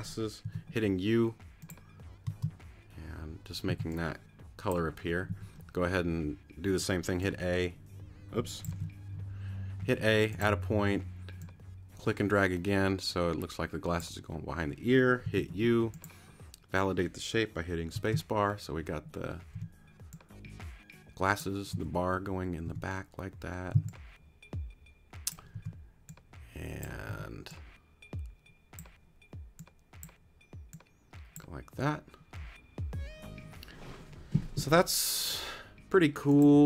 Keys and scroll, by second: 0.4 u, 2.2 space, 3.7 c, 5.3 a, 9.7 super+z, 10.8 a, 15.2 u, 17.9 space, 19.5 t, 21.7 a, 22.6 t, 24.7 c, 25.5 t, 27.1 t.